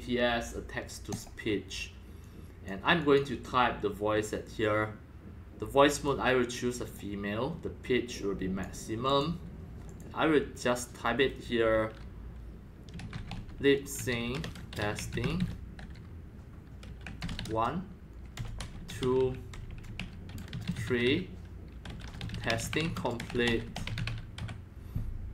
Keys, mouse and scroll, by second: 1.1 click, 2.2-2.7 drag, 3.0 click, 5.8 click, 6.8 click, 8.1-8.6 drag, 9.0 click, 9.8 click, 12.7-24.9 typing.